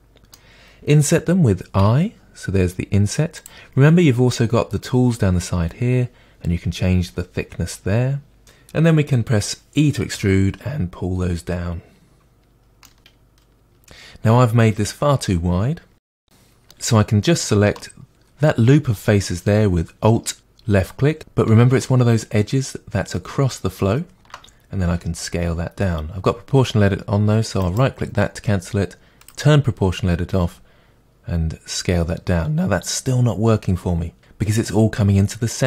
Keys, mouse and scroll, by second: 0.0-3.4 middle drag, 3.4 click, 3.4-5.5 middle drag, 6.4-8.4 drag, 10.1 e, 12.6 click, 12.8-18.1 middle drag, 18.1 alt+click, 24.8 s, 27.8 right click, 29.2 click, 30.3 s.